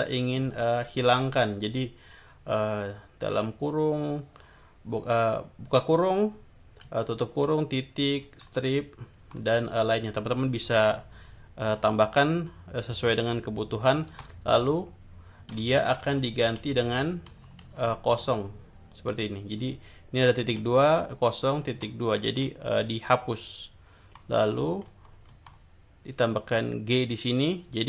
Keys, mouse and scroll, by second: 6.8 Right, 8.2 Right, 9.2 Right, 14.1 Right, 15.8 Right, 17.3 Right, 19.6 Left, 20.6 Right, 21.6 Right, 22.2 Left, 24.0 Right, 24.8 Right.